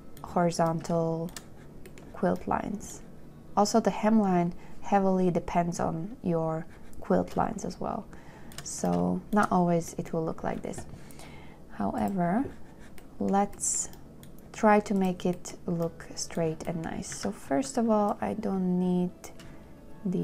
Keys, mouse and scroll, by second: 17.4 a, 20.0-20.2 shift+scroll.